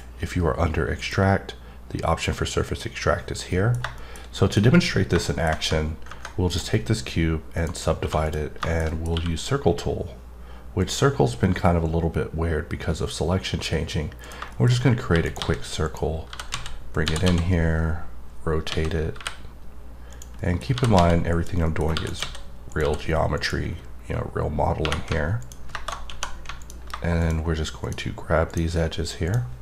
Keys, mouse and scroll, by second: 0.4 click, 0.9 click, 3.6 middle click, 3.9 middle click, 4.3 middle click, 4.6 scroll up 2, 5.2 middle click, 6.4 right click, 7.5 click, 8.2 click, 8.6 middle click, 8.8 double middle click, 10.8 click, 14.2 click, 14.5 middle click, 14.7 scroll up 2, 15.2 right click, 15.8 click, 16.9 click, 20.1 click, 20.4 middle click, 21.3 click, 21.6 middle click, 22.1 right click, 22.7 click, 23.4 click, 23.7-25.4 scroll up 2, 25.4 click, 26.6 click, 27.2 click, 27.8 click, 28.5 click, 29.3 click.